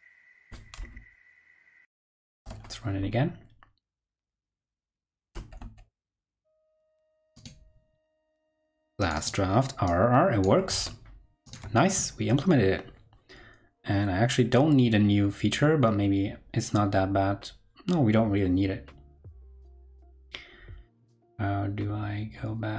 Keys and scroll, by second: 1.8 ctrl+Right, 2.2 super+r, 6.0 ctrl+Left, 10.7 super+Tab, 11.5 super+Tab.